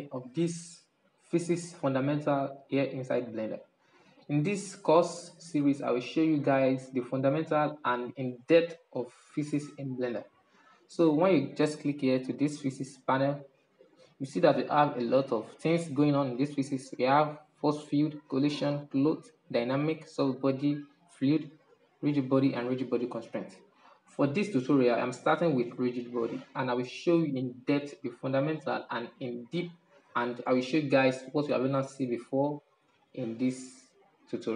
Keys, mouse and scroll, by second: 12.9 click, 13.4 click, 33.7 click.